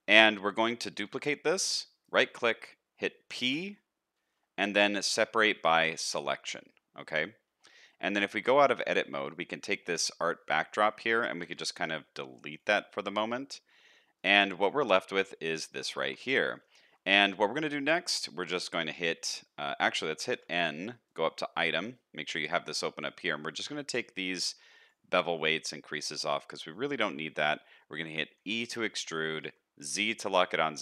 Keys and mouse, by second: 0.9 shift+d, 3.4 p, 6.6 middle click, 8.1 Tab, 8.4 middle click, 8.8 shift+middle click, 11.4 x, 14.9 shift+middle click, 16.0 Tab, 16.4 middle click, 16.8 a, 17.3 middle click, 20.3 n, 26.4 middle click, 28.3 e.